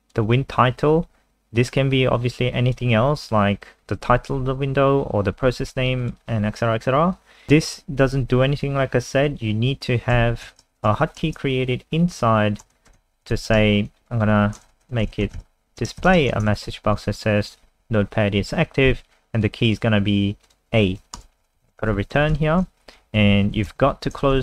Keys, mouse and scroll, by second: 10.5 Return, 10.5-17.4 typing, 17.8 Escape, 19.4 click, 21.1-22.3 typing, 23.0 Up, 23.2 Up, 23.3 Up, 23.6 Home, 23.8 ctrl+shift+Right, 24.2 ctrl+c.